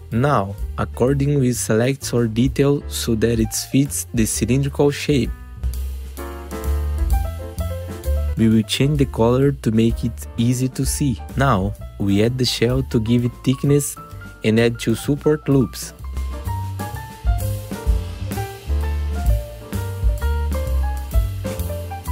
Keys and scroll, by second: 3.9 F4, 8.7 F4, 12.9 F4, 13.6 F4, 16.0 2, 16.3 F3, 17.4 F3, 18.7 F3, 19.7 ctrl+r, 21.0 F3.